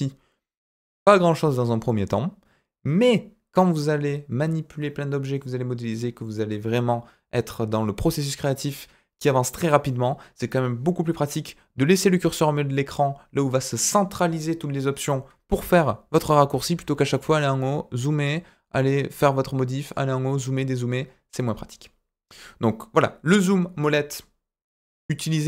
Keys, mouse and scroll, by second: 15.8-16.5 ctrl+middle drag, 17.4 click, 19.9 click, 24.2-25.4 scroll down 5.